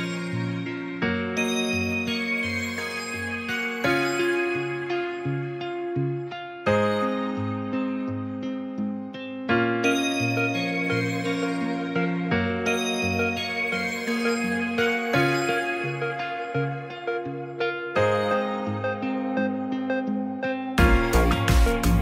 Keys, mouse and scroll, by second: 0.4-1.3 right drag, 1.6 middle drag, 3.2 ctrl+1, 4.1-4.9 middle drag, 5.5 middle drag, 6.6-7.8 drag, 7.8-8.3 middle drag, 9.0 shift+a, 11.3 s, 12.0 drag, 12.9 g, 13.2 shift+z, 14.8 middle drag, 15.7 alt+middle click, 16.4 s, 16.9 click, 17.3 shift+middle drag, 17.6 s, 17.7 z, 18.4 drag, 18.7-19.2 middle drag, 20.4 g, 20.5 shift+z.